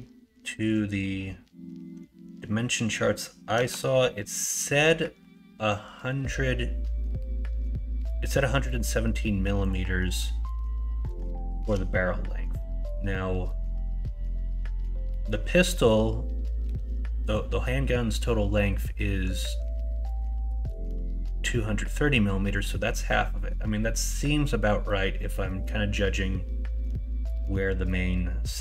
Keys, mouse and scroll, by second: 3.5 s.